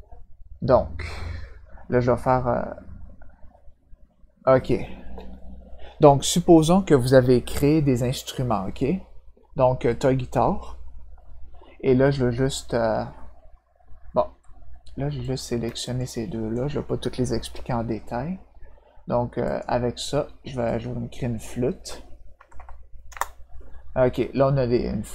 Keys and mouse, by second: 9.8 click, 15.2 click, 15.8 shift+click, 19.4 click, 20.6 click, 22.3 BackSpace, 23.0 Return.